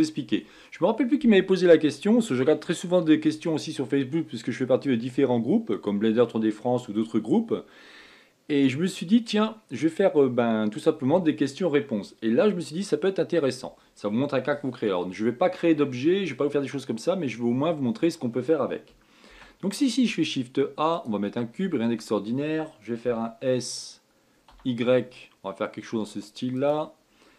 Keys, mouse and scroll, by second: 19.5 shift+a.